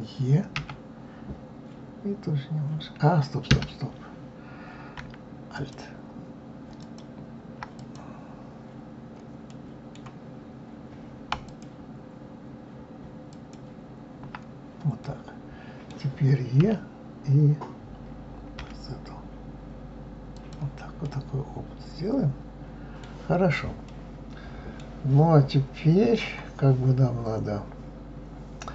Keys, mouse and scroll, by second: 0.6 e, 5.6 alt+click, 6.8 alt+click, 7.8 click, 9.4 scroll up 1, 9.5-11.5 middle drag, 11.5 alt+click, 13.3 alt+click, 15.0-16.6 middle drag, 16.6 e, 21.0-26.9 middle drag.